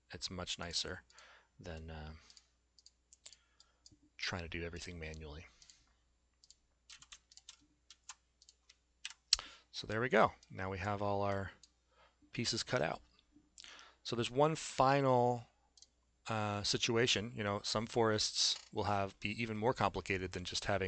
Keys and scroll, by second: 6.9 s, 7.9 alt+x, 9.0 Delete.